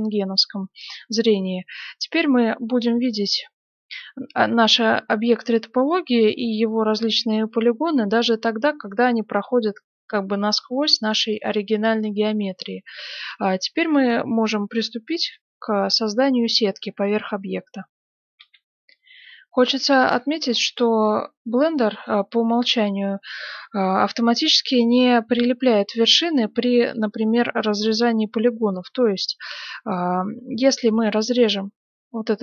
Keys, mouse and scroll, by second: 5.5-9.9 middle drag, 10.3-12.1 middle drag, 12.8-13.5 scroll down 1, 13.5-15.2 middle drag, 18.3 F9, 21.5-28.9 middle drag, 30.9 ctrl+r.